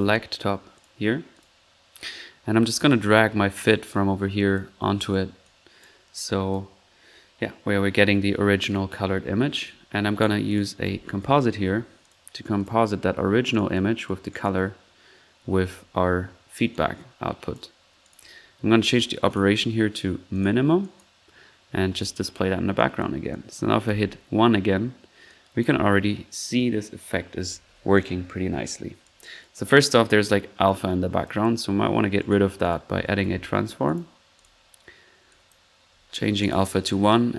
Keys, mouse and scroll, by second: 0.0-0.4 typing, 1.0-1.3 drag, 1.5-1.9 drag, 2.0 middle click, 2.0-2.4 scroll up 1, 2.8-3.5 typing, 3.1-4.7 drag, 5.0 middle click, 5.4 drag, 5.8-6.4 drag, 6.7-7.1 drag, 9.1 middle click, 9.4 middle click, 10.1-10.4 right drag, 10.5 click, 10.5 right click, 10.5-11.3 typing, 10.6 click, 12.2 click, 12.8 drag, 13.9 drag, 14.3 drag, 16.7-17.7 drag, 17.7-18.4 typing, 18.0 click, 19.3 drag, 20.3 drag, 20.5-21.4 typing, 20.8 click, 21.9 click, 22.4 middle click, 22.8-23.8 drag, 23.8 ctrl+1, 25.2 click, 29.0 click, 30.6-31.6 drag, 32.6 click, 32.7-33.7 typing, 34.4 click, 35.3-35.7 drag, 36.1-36.8 typing.